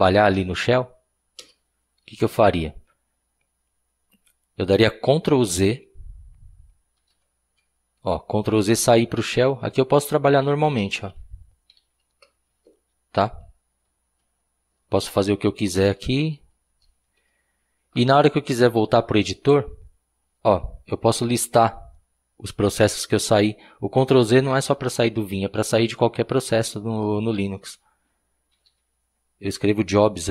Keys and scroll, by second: 1.4 Return, 7.0 ctrl+z, 9.3 ctrl+l, 10.4-12.3 typing, 13.9 ctrl+l, 15.7 Return, 15.9 Return, 16.0 Return, 16.1 Return, 16.3 Return, 16.7 Return, 17.0 ctrl+l, 28.3-29.2 typing, 30.2 typing.